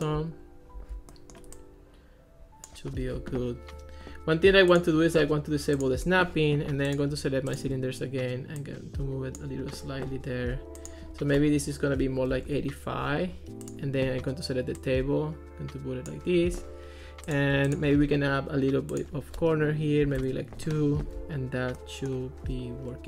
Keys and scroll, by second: 12.2 8, 12.5 Return, 20.1 2, 20.2 Return.